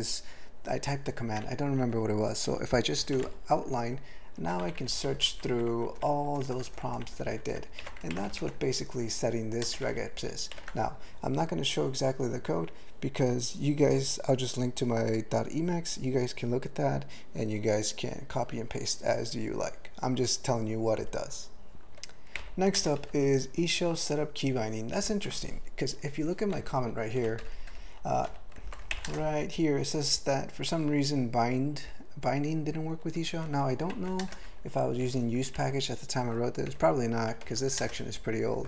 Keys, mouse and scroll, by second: 4.6 ctrl+n, 4.8 ctrl+n, 5.0 ctrl+n, 5.1 ctrl+n, 5.3 ctrl+n, 5.5 ctrl+n, 5.8 ctrl+n, 5.9 ctrl+n, 6.4 ctrl+n, 6.5 ctrl+n, 6.7 ctrl+n, 6.9 ctrl+n, 7.1 ctrl+n, 7.3 ctrl+n, 7.5 ctrl+n, 7.8 ctrl+g, 9.6 ctrl+space, 9.8 ctrl+alt+b, 10.5 ctrl+g, 22.3 ctrl+n, 22.7 ctrl+space, 23.0 ctrl+alt+f, 25.0 ctrl+g, 28.3 a, 28.9 alt+m, 29.1 ctrl+space, 33.0 ctrl+g, 33.3 ctrl+n, 33.9 alt+m, 34.2 ctrl+space, 34.3 ctrl+e, 35.0 ctrl+g, 35.6 ctrl+n, 36.7 ctrl+p, 36.9 ctrl+p, 37.4 alt+m, 37.8 ctrl+space, 37.9 ctrl+e.